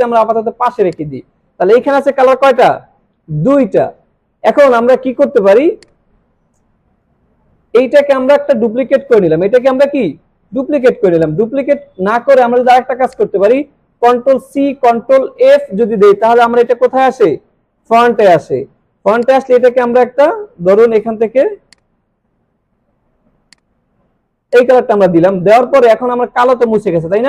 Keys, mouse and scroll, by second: 5.8-7.1 drag, 7.5 ctrl+z, 8.1-9.0 alt+drag, 9.8 click, 13.1 click, 15.3 ctrl+f, 19.2 click, 21.7 click.